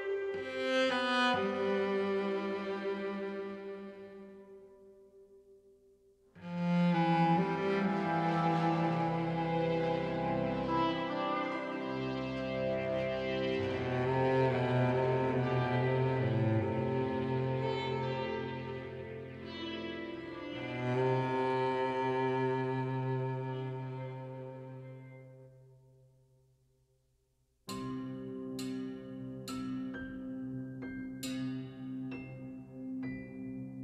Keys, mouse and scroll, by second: 0.0 alt+middle click, 0.1-1.2 alt+drag, 1.2 alt+middle click, 2.2 alt+shift+click, 2.9 alt+shift+middle click, 2.9 alt+shift+click, 3.6 super+z, 3.6-8.9 alt+shift+super+middle drag, 9.4-19.0 shift+middle drag, 20.4-33.8 middle drag.